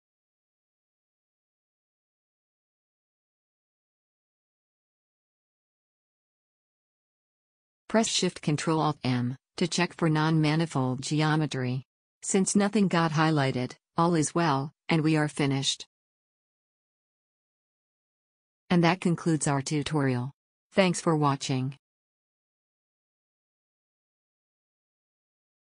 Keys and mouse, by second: 1.5-3.3 drag, 6.0 a, 7.9 ctrl+alt+shift+m, 9.0 z, 13.1 z, 13.5 Tab, 19.1-23.3 drag.